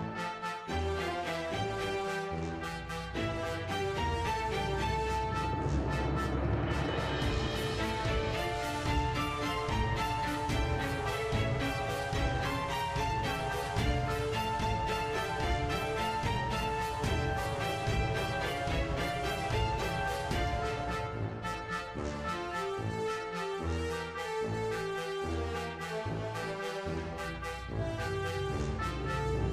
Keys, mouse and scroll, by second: 0.4 click, 1.0 a, 1.2 i, 1.7 click, 2.0 space, 2.8 space, 2.9-3.3 drag, 4.0 click, 5.4 shift+d, 6.8-7.4 drag, 7.7 click, 8.7 click, 9.0 click, 9.4 a, 10.1 drag, 10.5 shift+d, 11.8 click, 12.0-14.3 typing, 12.5 click, 14.0 click, 14.5 click, 16.0 ctrl+z, 16.2 click, 16.5 click, 16.6 space, 16.8 space, 17.0 click, 17.3 click, 18.2 i, 18.7 click, 19.2 click, 19.7 i, 20.1-20.8 drag, 20.9 space, 23.9 space, 24.8-29.5 drag.